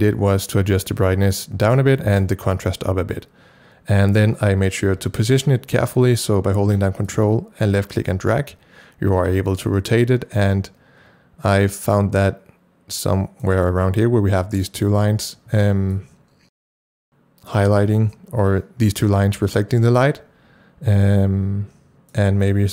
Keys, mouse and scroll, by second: 5.2 click, 7.1-15.9 ctrl+drag, 15.9-20.0 ctrl+drag, 20.0-22.7 ctrl+drag.